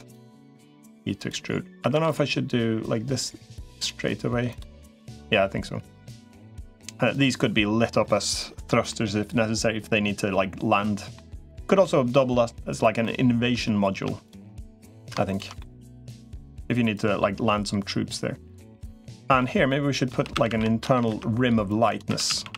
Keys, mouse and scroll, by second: 0.3 e, 1.7 a, 1.9 g, 4.3 click, 4.6-6.3 middle drag, 6.9 click, 7.8 middle click, 8.7-10.9 middle drag, 11.5 middle click, 12.8 middle click, 15.1 shift+click, 15.4 middle click, 16.2 middle click, 16.9-18.7 drag, 18.8 middle click, 19.5 middle click, 19.9 3, 20.1 a, 20.3 a, 20.9 ctrl+r, 21.9 3, 22.1 a, 22.3 a.